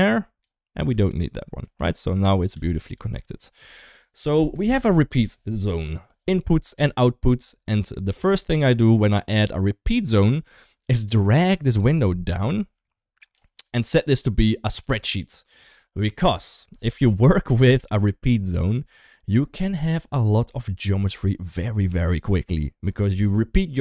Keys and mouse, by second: 0.9 ctrl+right click, 1.5 middle click, 2.1 click, 2.3 g, 8.6 middle click, 11.0-13.2 drag, 13.8 click.